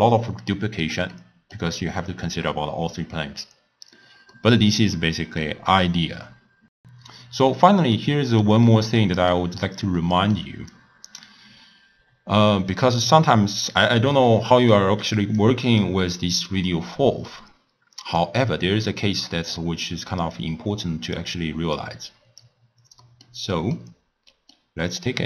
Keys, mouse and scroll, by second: 0.1 x, 0.5-4.2 middle drag, 4.4-6.7 middle drag, 7.9 scroll up 1, 7.9-9.7 middle drag, 9.7 scroll up 1, 10.0-10.8 middle drag, 10.8 click, 11.6-12.1 scroll up 3, 12.1-12.7 scroll down 1, 12.7-15.4 middle drag, 15.4-16.7 drag, 16.7-18.0 middle drag, 18.0 click, 18.8-20.3 middle drag, 20.3 drag, 21.8 click, 23.1-25.2 middle drag.